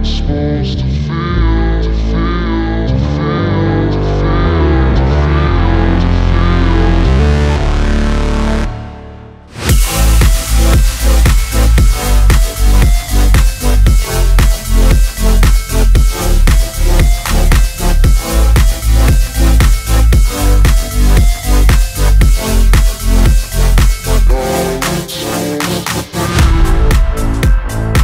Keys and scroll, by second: 5.2-6.2 typing.